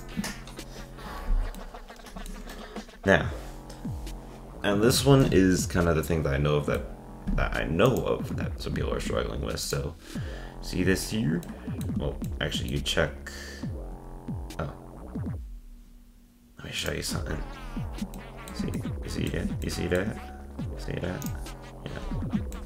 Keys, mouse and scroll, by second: 1.6-4.6 middle drag, 5.2-7.9 middle drag, 7.9 click, 8.9 ctrl+Tab, 9.6 click, 10.5-11.5 scroll up 4, 11.5-12.9 middle drag, 12.9 scroll down 1, 14.5-15.5 scroll up 2, 15.5 scroll down 2, 16.8 click, 17.3 scroll up 2, 18.1-19.0 shift+middle drag, 21.6 click, 22.0 scroll up 1, 22.5-22.6 shift+middle drag.